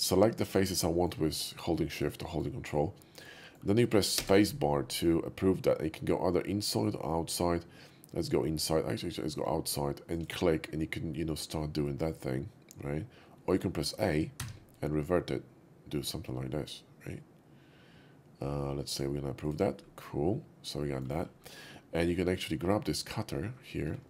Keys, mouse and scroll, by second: 0.0 shift+click, 0.5 shift+click, 0.9 shift+middle drag, 1.4 shift+click, 1.9-2.4 shift+middle drag, 3.4 shift+middle click, 4.0 space, 10.0 click, 14.5 a, 16.5 a, 18.8 click, 19.3 click, 20.0-21.0 middle drag, 22.2 click, 22.9 click.